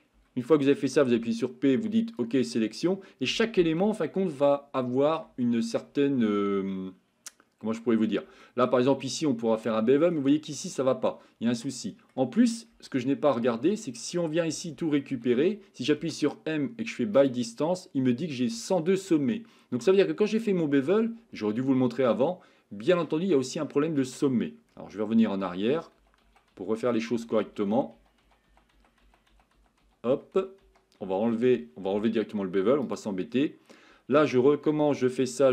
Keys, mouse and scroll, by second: 2.6 middle click, 3.9 shift+middle click, 4.8 middle click, 5.4 shift+middle click, 6.7-8.1 middle drag, 8.4 shift+middle click, 9.8 shift+middle click, 10.6-12.1 middle drag, 18.8-22.9 middle drag, 31.3 ctrl+z, 33.4 middle click.